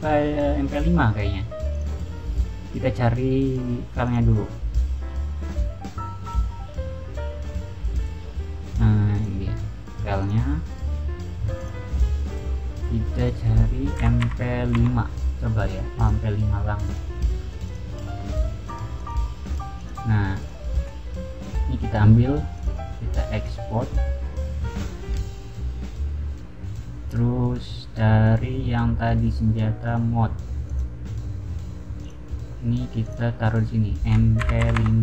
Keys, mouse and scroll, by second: 1.7 click, 4.0 click, 5.4 middle click, 9.1 click, 10.1 click, 11.5 click, 13.1 click, 13.9 m, 14.7 5, 15.9 click, 16.8 click, 17.4 click, 17.6 click, 18.6 click, 18.9 click, 19.4 click, 19.7 click, 20.3 click, 21.3 click, 22.5 click, 23.3 click, 24.1-25.3 scroll down 6, 27.6-28.7 scroll up 2, 28.7-30.6 scroll down 4, 30.6 click, 31.9 click, 32.9 click, 34.1-35.0 typing.